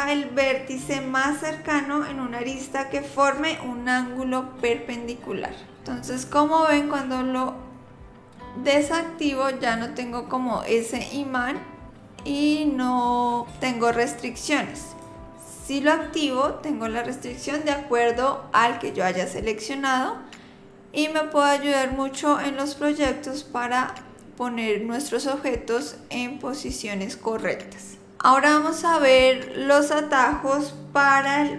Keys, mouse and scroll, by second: 8.8 click, 9.8 click, 18.7 click.